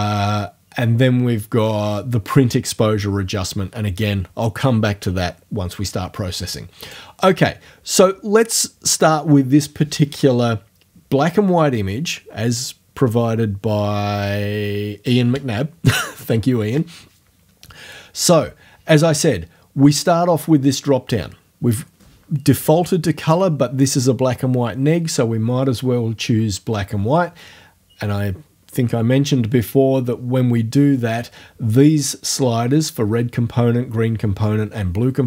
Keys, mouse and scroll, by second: 6.9 click, 23.3 click.